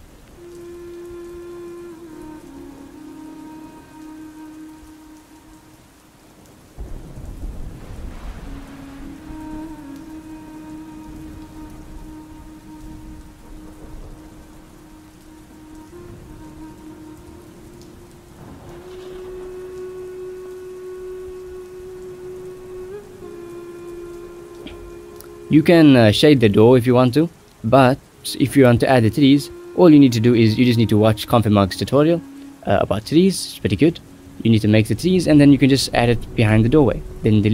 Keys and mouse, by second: 0.0-2.3 drag, 2.4 click, 3.6 middle click, 4.3-4.6 drag, 5.2-6.0 drag, 6.4 middle click, 7.3-8.8 drag, 9.2 middle click, 9.6 click, 10.8 shift+middle click, 11.3 click, 11.6 shift+middle click, 13.9 middle click, 14.1 middle drag, 14.4 middle click, 14.7 middle click, 15.5 click, 16.7 drag, 19.8 middle click, 24.2 middle click, 24.8 click, 25.8-26.8 drag, 27.5 shift+middle click, 28.1 ctrl+s, 28.2 shift+middle click, 30.2 middle click, 30.6 click, 33.1 shift+middle click, 33.8 ctrl+s, 34.1 shift+middle click, 35.9 click, 36.2 shift+middle click, 36.5 drag, 36.9 shift+z.